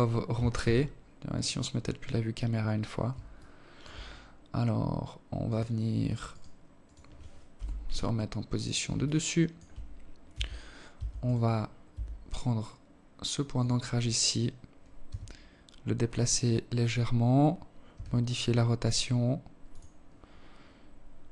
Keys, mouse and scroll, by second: 0.7 scroll up 2, 0.9 scroll down 1, 1.7 alt+shift+click, 2.7 scroll up 1, 3.9 right click, 4.7 right click, 5.3 right click, 5.9 KP_7, 7.4 alt+shift+click, 8.5 scroll up 1, 8.6 scroll down 1, 8.7 Tab, 9.3 Tab, 9.7 right click, 10.0-10.3 scroll down 3, 10.3 Tab, 12.0 right click, 13.5 g, 16.5 r, 19.9 g.